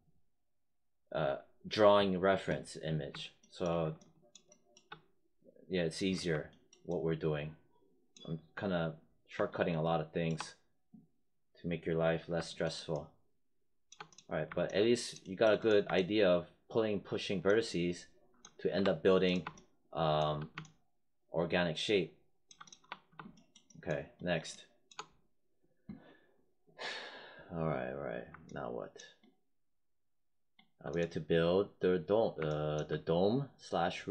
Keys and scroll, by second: 18.6 3, 22.7 1.